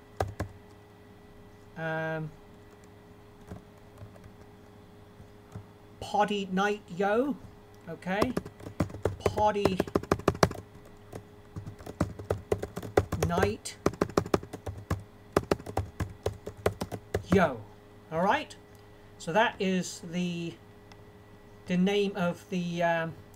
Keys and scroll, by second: 0.2-0.9 typing, 4.0 ctrl+alt+Down, 7.1 ctrl+alt+Right, 7.3 ctrl+alt+Right, 8.6-9.9 typing, 11.6 shift+', 12.2 a, 12.9 shift+space, 13.1 i, 14.4 BackSpace, 16.5-17.9 typing.